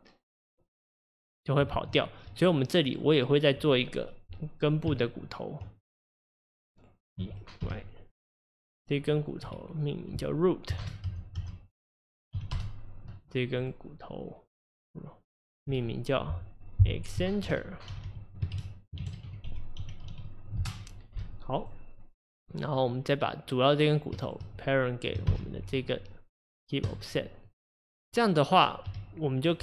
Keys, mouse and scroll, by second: 1.8 ctrl+z, 2.4 drag, 2.9 click, 4.9 Tab, 6.1 click, 7.2 e, 9.5 F2, 11.4 o, 13.6 click, 15.7 F2, 18.0 g, 21.6 click, 22.7 click, 24.3 shift+click, 25.3 ctrl+p, 27.5 click, 27.9 click, 28.9 g.